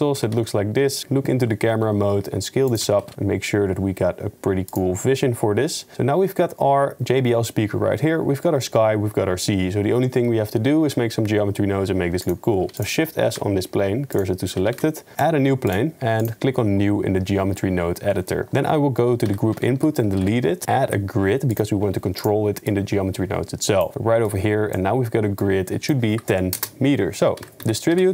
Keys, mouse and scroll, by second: 0.2 g, 1.0 KP_0, 1.8 s, 2.9 g, 13.3 shift+s, 14.8 shift+a, 16.2 click, 18.2 middle click, 18.5 drag, 19.2 x, 19.7 shift+a, 22.7 click, 23.0-23.8 drag, 24.4 middle click, 25.4-26.5 middle drag, 26.7 middle click, 27.4 shift+a.